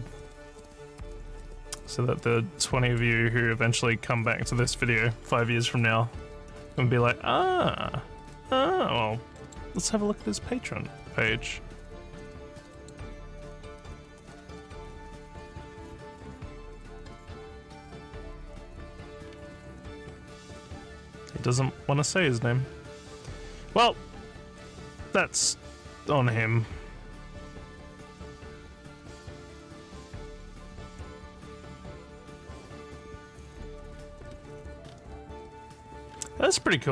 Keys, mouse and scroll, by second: 0.6-2.9 drag, 9.3 middle click, 12.7 click, 15.8 scroll up 1, 16.8 scroll up 1, 18.6 scroll down 1, 19.3 scroll, 21.9 scroll down 2, 22.7 scroll down 1, 24.6 scroll down 4, 28.8 scroll up 1, 33.6 scroll down 1, 34.3 scroll down 1, 34.9-35.6 scroll down 3, 35.6 scroll up 3, 36.1-36.6 scroll down 5.